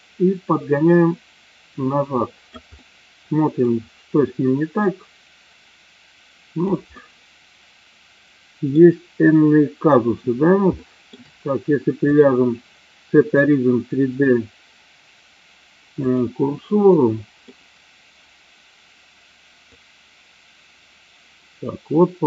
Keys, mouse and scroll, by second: 2.7-3.8 middle drag, 4.9-6.6 drag, 7.0 scroll up 1, 7.1-8.8 middle drag, 10.8-11.1 shift+middle drag, 12.0-16.1 drag, 16.9-17.3 middle drag, 19.7-22.2 drag.